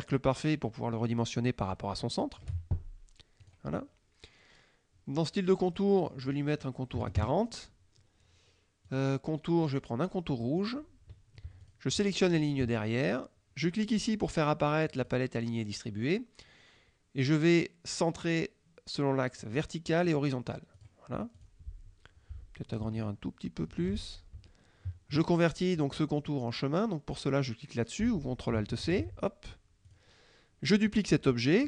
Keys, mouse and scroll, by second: 3.5 click, 5.9 click, 7.0 KP_4, 7.3 KP_Enter, 8.9 click, 9.7-10.9 drag, 11.7 shift+click, 14.9 click, 19.5 click, 20.2 click, 20.9 click, 21.5 click, 23.1 ctrl+shift+click, 24.4 ctrl+shift+F2, 28.9 ctrl+alt+c, 29.9 click.